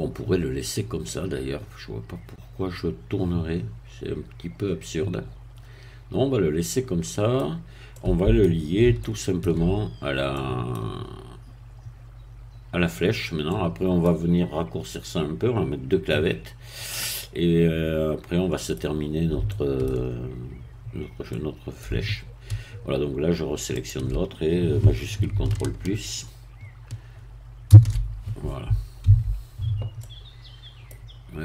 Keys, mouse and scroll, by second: 7.5 scroll down 2, 7.9 middle click, 9.0 shift+middle click, 9.9-10.3 shift+scroll up 1, 10.3 middle click, 13.5-14.5 middle drag, 16.9-18.9 middle drag, 18.9-19.3 scroll down 1, 19.5 shift+middle click, 20.3-20.8 shift+scroll up 1, 21.3-23.7 middle drag, 23.7 shift+click, 27.7 ctrl+shift++, 29.0 a, 30.0-31.1 middle drag.